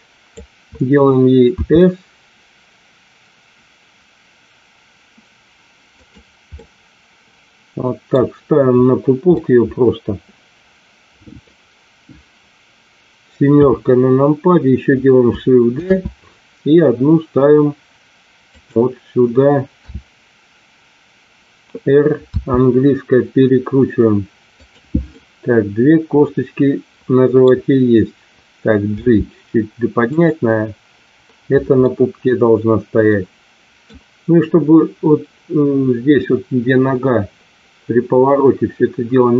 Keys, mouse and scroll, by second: 1.7 s, 6.6-8.1 middle drag, 9.3-11.4 middle drag, 13.4 KP_7, 15.7 shift+d, 18.6 click, 19.8 w, 22.4 r, 25.2-27.3 middle drag, 28.9 g, 31.8-33.8 middle drag.